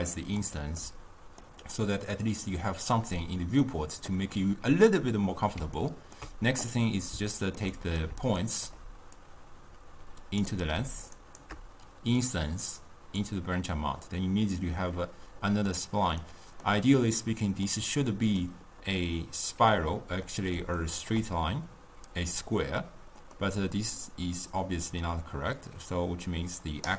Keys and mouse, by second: 0.9-8.2 middle drag, 8.5 shift+right click, 9.3-11.3 drag, 11.3 shift+right click, 12.3-15.3 drag, 16.3-25.7 middle drag, 25.7-26.9 drag.